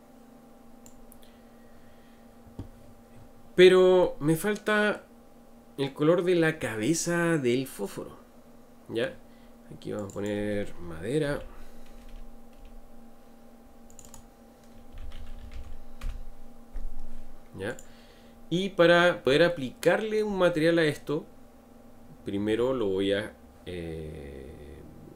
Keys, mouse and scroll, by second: 4.0-7.1 middle drag, 10.0-12.6 drag, 12.6 Return, 13.9 click, 14.0-17.0 drag, 17.7 click, 18.8 scroll up 2, 19.5-22.6 shift+middle drag.